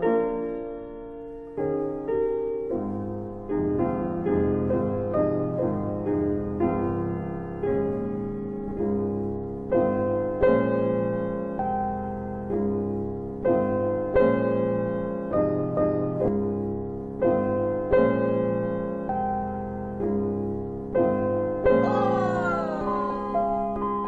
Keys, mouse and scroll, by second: 8.6 alt+click, 9.7 alt+right click, 10.0 alt+click, 10.1 alt+click, 10.4 alt+click, 10.4 alt+double middle click, 17.6 click, 23.9 click.